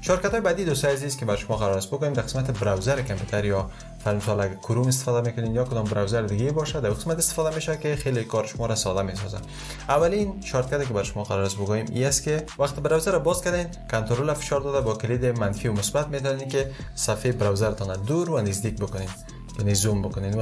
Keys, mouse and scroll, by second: 14.5 ctrl+-.